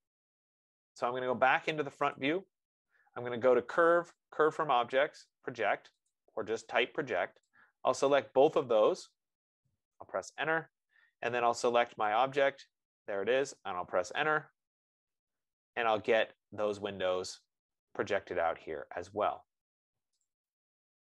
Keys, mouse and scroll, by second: 0.1 click, 2.4 click, 4.6 click, 10.8 Return, 12.6 click, 14.5 Return, 20.6 click.